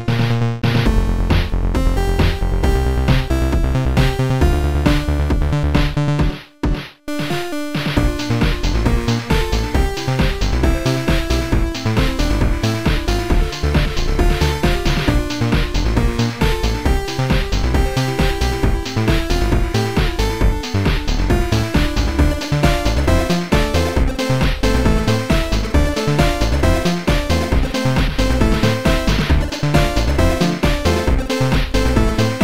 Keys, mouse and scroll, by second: 0.1 click, 1.8 click, 3.1 click, 6.7 right click, 9.4 right click, 9.4 click, 13.4 click, 17.6 click, 21.6 click, 22.3 click, 23.4 click, 24.5 click, 25.7 click, 26.9 click, 27.9 click, 28.4 click, 30.9 click, 32.3 click.